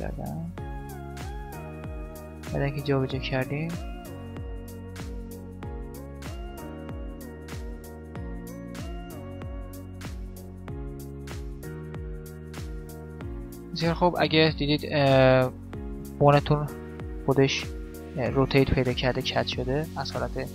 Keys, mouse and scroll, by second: 1.4 middle click, 2.3-3.4 middle drag, 2.3-5.2 right drag, 4.9 click, 5.2 middle click, 5.8 click, 5.8 right click, 6.0-8.1 typing, 6.8 right click, 8.9 right click, 9.0 middle click, 9.3 g, 10.4 right click, 10.9 middle click, 11.0 middle click, 11.3 KP_7, 12.0 middle click, 17.0-18.6 middle drag, 18.8 middle click, 19.0 click, 19.0-20.5 middle drag.